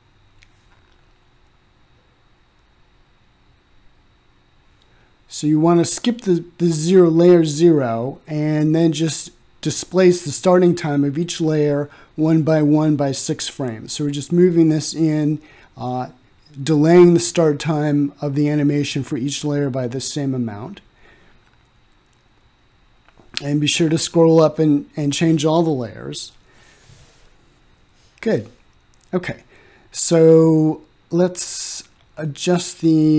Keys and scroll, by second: 28.2 ctrl+z.